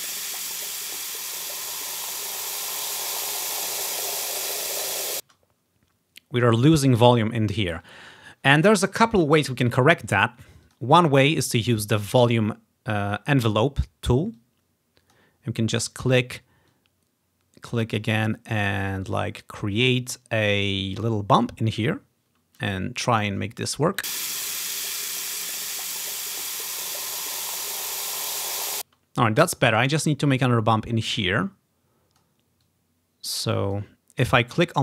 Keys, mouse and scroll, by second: 5.3 space, 10.7-12.0 drag, 14.4 click, 16.8 click, 18.1 click, 21.4-22.8 drag, 24.1 space, 29.0 space, 31.4 click, 32.7-33.9 drag, 34.3-34.8 drag.